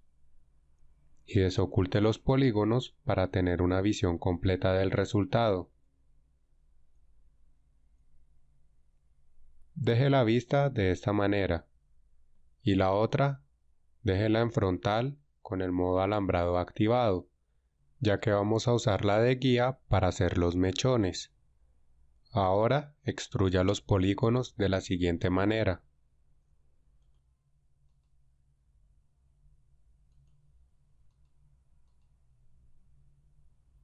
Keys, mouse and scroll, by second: 3.9 alt+h, 25.2 e, 28.6 e, 33.2 e.